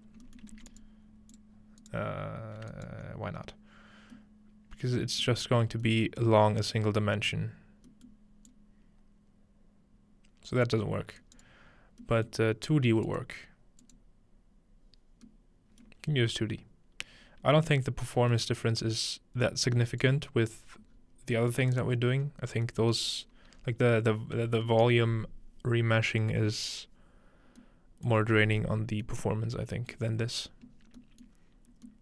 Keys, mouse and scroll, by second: 0.6 shift+a, 0.8-1.8 drag, 4.3-6.9 middle drag, 8.5-12.3 drag, 11.2-12.3 right drag, 13.1 click, 13.8 click, 18.1-19.3 scroll down 2, 19.5-20.5 drag, 20.5-21.1 scroll down 2, 21.4-22.4 middle drag, 22.2 scroll up 1, 23.1 scroll up 2, 23.6-24.5 scroll down 6, 24.9-27.1 middle drag, 29.6 shift+middle click, 30.0 middle click, 31.3 middle click, 31.5-31.9 scroll up 1.